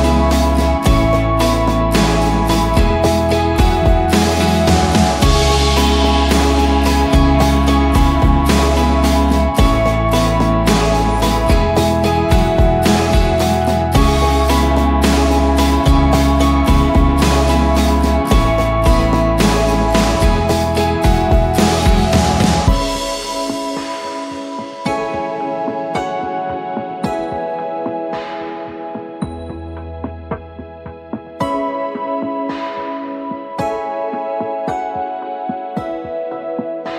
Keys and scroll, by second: 0.0-1.0 typing, 1.2 ctrl+a, 2.5 ctrl+d, 2.7-3.4 shift+Right, 3.4 shift+Down, 3.5-9.2 shift+Down, 9.2-11.6 typing, 11.8 Return, 13.2 ctrl+t, 19.3 Return, 22.7-23.6 typing, 24.9-25.6 typing, 27.4-28.2 typing, 27.7 Tab, 27.8 Tab, 29.3-30.0 typing, 30.3 Return, 34.8-36.9 typing.